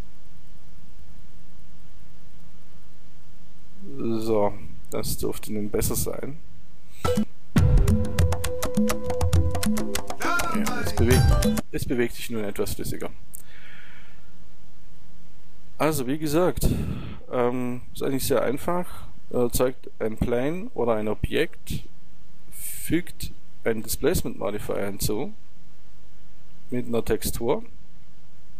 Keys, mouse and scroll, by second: 11.5-13.2 drag, 13.2-16.2 middle drag.